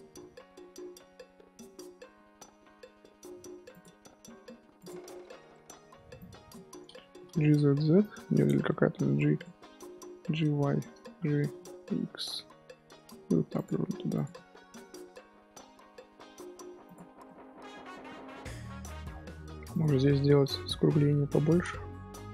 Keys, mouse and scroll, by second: 4.7 click, 5.5 middle click, 5.9 1, 6.1 click, 8.6 middle drag, 8.9 g, 9.5 scroll down 2, 9.6 middle click, 10.1 g, 13.8 scroll up 1, 14.1 click, 14.3-16.8 middle drag, 16.8 click, 17.1 scroll down 2, 17.2-19.7 middle drag, 19.7-22.3 drag.